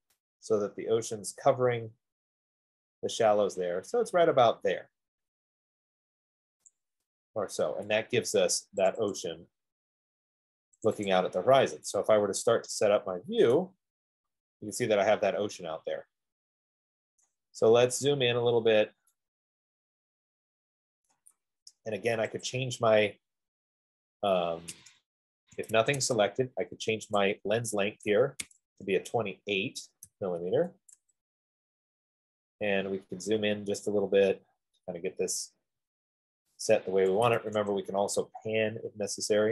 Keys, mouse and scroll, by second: 7.1-9.2 drag, 11.3 click, 11.5 click, 13.8 right click, 14.2 middle click, 14.3 middle click, 17.6 right click, 17.9 middle click, 18.1 middle click, 18.2 middle click, 18.5 middle click, 18.9 scroll, 21.3 right click, 22.7 click, 22.8 middle click, 25.6 Escape, 26.4 F15, 26.4 Escape, 29.3 BackSpace, 30.3-31.9 BackSpace, 31.9 Tab, 31.9 click, 33.2 middle click, 33.9 middle click, 35.4 typing, 37.4 typing, 37.7 Return, 39.0 typing.